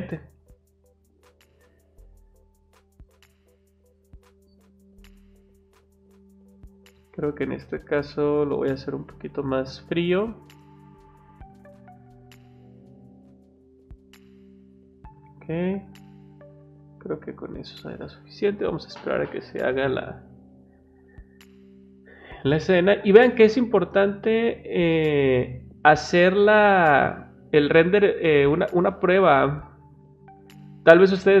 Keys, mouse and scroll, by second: 2.1 click, 3.2-3.9 drag, 4.5-5.5 drag, 5.9 click, 7.3 click, 9.0 click, 11.8 click, 14.1 click, 14.7 click, 15.8 click, 16.5 click, 17.1 click, 17.4 click.